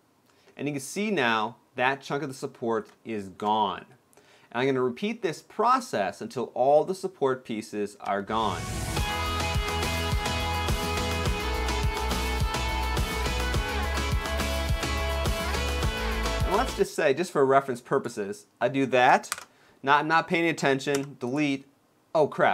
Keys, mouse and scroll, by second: 0.1 middle click, 2.8 middle click, 2.8 shift+middle click, 4.2 scroll up 1, 7.7 b, 10.5 b, 11.3 ctrl+l, 11.4 x, 11.8 shift+middle click, 12.0 b, 12.4 ctrl+l, 12.7 x, 13.0 middle click, 13.2 shift+middle click, 13.4 shift+middle click, 14.1 ctrl+l, 14.3 middle click, 15.3 x, 15.6 shift+middle click, 15.7 middle click, 15.8 shift+middle click, 16.0 scroll up 1, 16.3 b, 19.1 ctrl+l, 20.6 ctrl+l, 20.6 x.